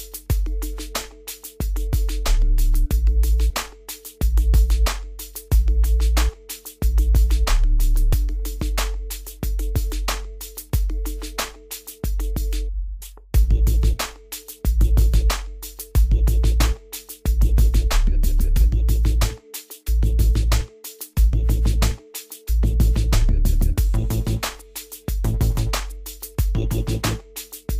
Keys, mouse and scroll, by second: 0.9 scroll up 1, 1.5 scroll down 1, 3.7 scroll up 1, 4.8 scroll down 1, 6.5-11.3 drag, 11.3 scroll up 1, 12.3 scroll down 1, 14.5-17.8 drag, 17.8 scroll up 1, 18.3 scroll down 1, 21.7-26.8 drag, 26.8-27.1 scroll down 1.